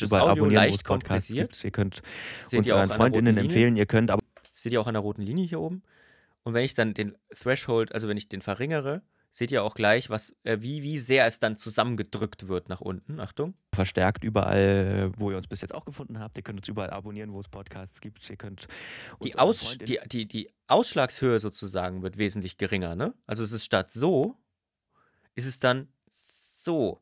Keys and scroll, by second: 4.0 space, 19.7 space.